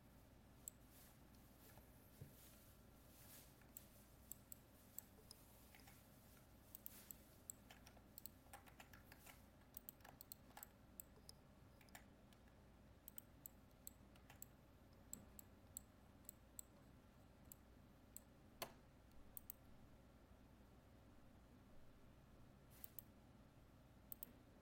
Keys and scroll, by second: 2.5 ctrl+-, 9.2 ctrl+Tab.